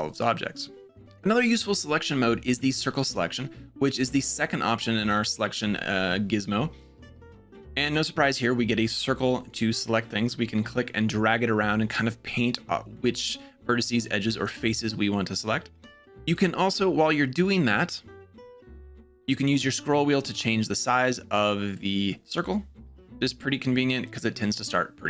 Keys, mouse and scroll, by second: 3.8-6.7 drag, 9.3-16.0 drag, 16.1 click, 17.0-24.7 drag.